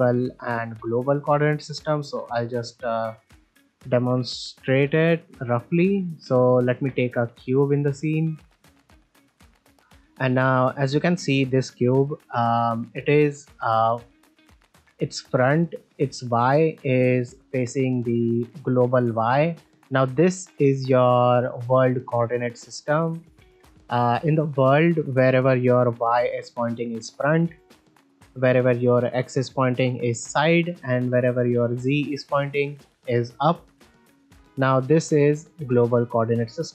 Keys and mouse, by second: 1.2-1.5 middle drag, 3.0 ctrl+middle drag, 4.7 z, 5.6 middle drag, 6.2 click, 6.5 shift+middle click, 6.9 shift+a, 9.0 ctrl+middle drag, 10.9 middle drag, 11.1 shift+middle click, 11.5 ctrl+middle click, 11.7 middle drag, 13.2-13.8 drag, 14.1 middle click, 14.4 shift+middle click, 14.7 ctrl+middle drag, 15.2 middle click, 17.9 middle click, 23.0 shift+middle click, 23.4 ctrl+middle click, 23.7 shift+middle click, 24.0-24.5 middle drag, 27.5-27.9 middle drag, 28.3 middle drag, 30.0 shift+middle click, 31.1 middle drag, 33.5 middle drag, 33.9 shift+middle drag, 34.2 ctrl+middle click, 34.4 middle click, 35.2 click.